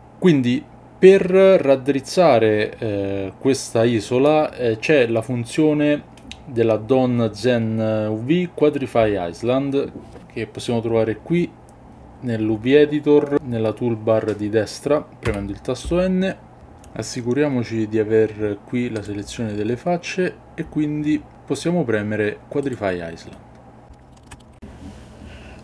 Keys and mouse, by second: 15.2 n, 22.6 click, 24.1 ctrl+middle click.